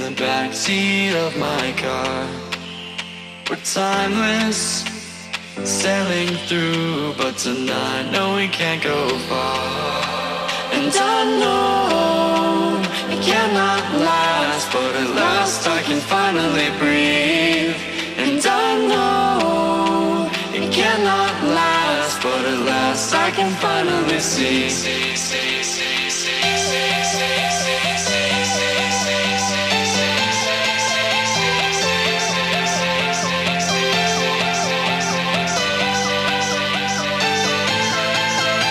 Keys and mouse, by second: 1.3 click, 2.9 ctrl+a, 3.7 click, 5.1-7.1 shift+drag, 7.1-9.5 shift+drag, 12.6 BackSpace, 13.5 click, 16.2 click, 21.0-30.5 drag, 31.2 Down, 34.2 click, 35.7 Up, 36.5-38.7 alt+drag.